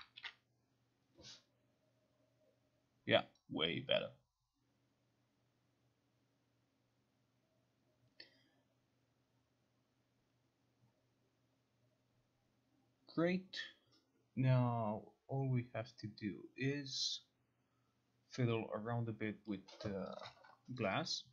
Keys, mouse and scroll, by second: 20.2 click, 20.4 click.